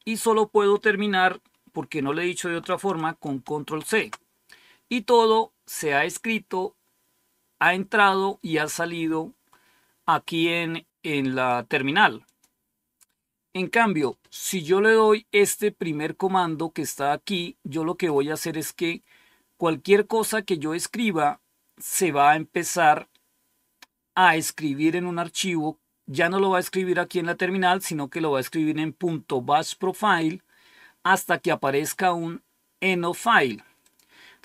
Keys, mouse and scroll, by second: 3.7 ctrl+c, 10.9-12.4 drag, 15.3-17.6 drag, 33.8 click.